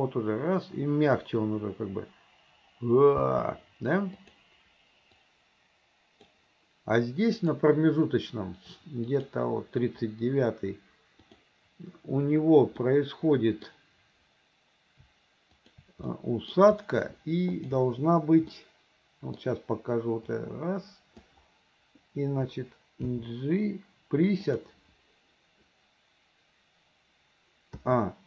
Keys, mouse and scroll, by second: 3.2 space, 4.2 click, 5.3-6.3 drag, 7.4 click, 9.1 click, 11.2 click, 12.8-13.7 middle drag, 15.5 shift+click, 16.1-16.5 middle drag, 17.5 shift+click, 18.6 middle click, 20.5 click, 23.1 g, 27.8 a.